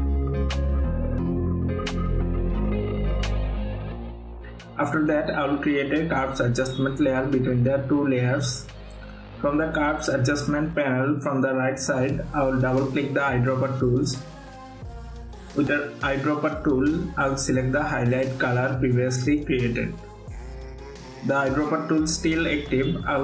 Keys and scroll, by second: 2.4 ctrl+alt+f, 3.2 ctrl+d.